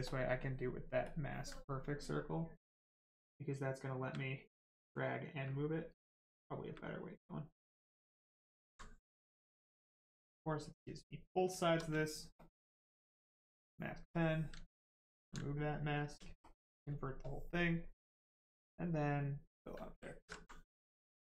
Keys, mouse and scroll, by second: 0.1 ctrl+click, 1.1 ctrl+click, 2.7 ctrl+click, 5.9 space, 8.0 space, 8.7 alt+right click, 9.3 right click, 9.4 right click, 13.5 ctrl+click, 14.1 ctrl+click, 15.5 right click, 16.4 ctrl+click, 16.7 right click, 16.9 shift+right click, 19.2 click, 20.0 ctrl+click, 20.4 alt+right click, 20.9 alt+right click, 21.0 alt+right click.